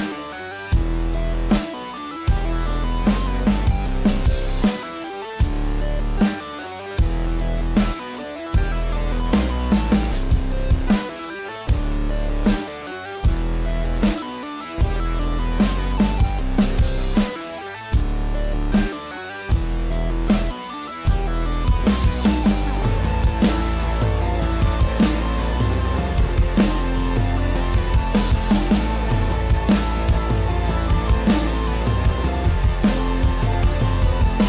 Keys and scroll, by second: 2.6 ctrl+s, 17.9 ctrl+=, 18.8 space, 30.8 space, 31.4 ctrl+-, 31.7 ctrl+=.